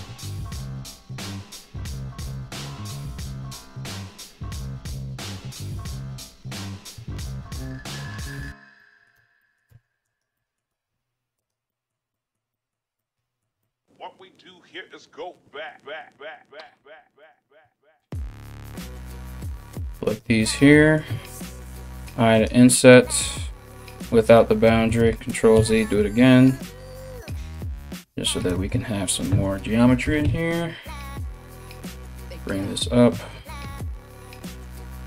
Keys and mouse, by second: 0.0 middle click, 0.0 g, 0.9 right click, 1.1 middle click, 1.1 g, 1.9 right click, 2.0-3.2 middle drag, 2.0 g, 3.2 right click, 3.3-5.7 middle drag, 3.4 g, 5.7 right click, 5.9-13.3 middle drag, 5.9 g, 6.9 ctrl+r, 8.7 Tab, 9.3 Tab, 9.6 right click, 10.3 g, 15.8 3, 16.8 right click, 17.6 ctrl+right click, 17.9 ctrl+right click, 18.3 ctrl+right click, 18.8-26.6 middle drag, 19.4 shift+click, 19.6 shift+click, 21.9 i, 23.3 click, 24.5 ctrl+z, 25.1 i, 26.6 2, 27.0 right click, 28.1 right click, 28.7 shift+right click, 29.6 g, 32.8-35.0 middle drag, 34.1 3, 34.3 right click, 34.8 right click.